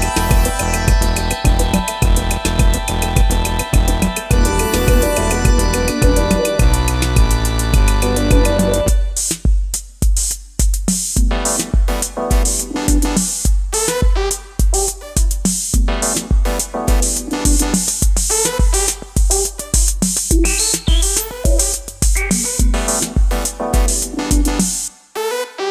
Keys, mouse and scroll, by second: 19.5-22.0 scroll down 1.